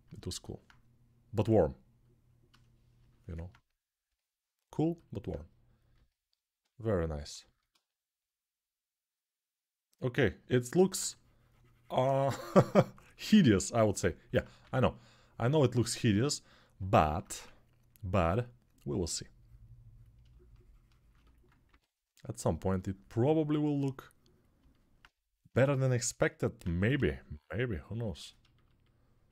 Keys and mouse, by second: 3.8-29.3 alt+drag, 14.4 3, 17.1 1, 21.4 3, 26.7 g.